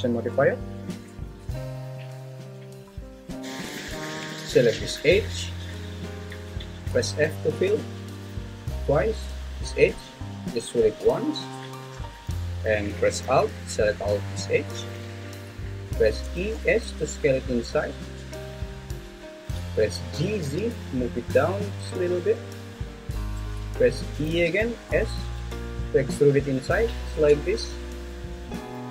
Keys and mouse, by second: 2.0 click, 7.2 f, 7.7 f, 9.9 click, 11.0 f, 14.5 alt+click, 16.2 e, 16.5 s, 18.9 s, 20.1 g, 20.4 z, 22.3 click, 24.3 e, 24.9 s.